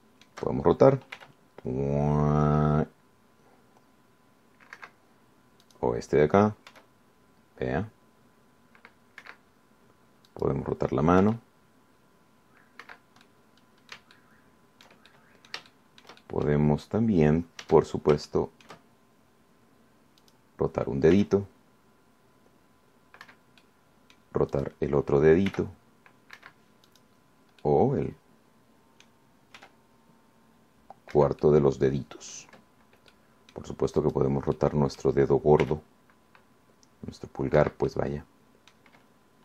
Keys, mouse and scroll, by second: 0.2 middle click, 0.8 shift+click, 2.4 r, 6.0 Escape, 6.8 click, 7.9 r, 10.4 Escape, 11.5 click, 12.4 r, 14.0 Escape, 14.5 click, 15.2 Caps_Lock, 15.6 click, 16.6 shift+click, 17.1 shift+right click, 18.3-18.6 scroll up 1, 18.8 Caps_Lock, 19.4 shift+scroll up 1, 19.5 shift+right click, 19.5 shift+click, 19.7 shift+right click, 21.4 right click, 22.4 r, 24.4 Escape, 24.8 right click, 25.0 middle click, 25.8 click, 26.7 r, 27.6 Escape, 28.1 click, 28.8-30.4 middle drag, 30.8 r, 32.4 Escape, 32.6-33.8 drag, 34.4 click, 35.2 right click, 35.8 click, 36.2 scroll up 1, 36.8 r, 38.8 Escape, 39.1-39.4 drag.